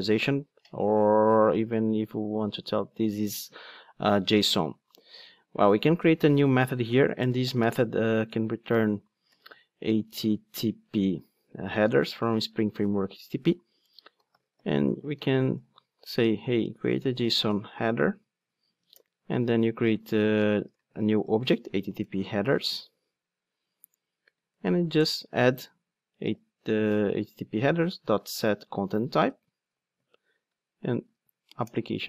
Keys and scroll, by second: 12.7 Return, 22.0 Return, 23.6 alt+Return, 27.5 Return.